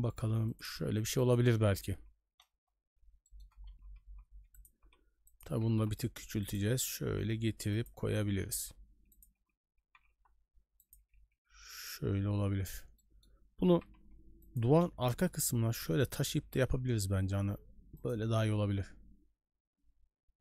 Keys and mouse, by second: 1.9 n, 2.5 KP_0, 3.2 shift+middle drag, 3.7 g, 4.8 s, 5.5 g, 7.0 s, 8.2 g, 9.8 g, 11.0 a, 11.2 a, 11.8 right click, 12.4 KP_Decimal, 13.0 middle click, 13.7 g, 15.1 KP_0, 16.0 shift+middle drag, 16.4 g.